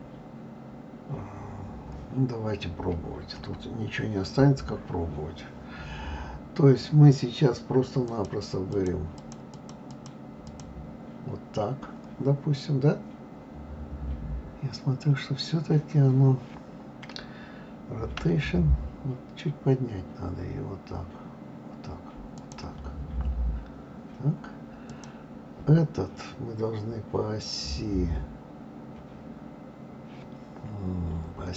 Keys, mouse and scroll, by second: 3.4 KP_3, 8.1-13.4 drag, 13.4-16.4 scroll up 2, 18.2 r, 24.9 click.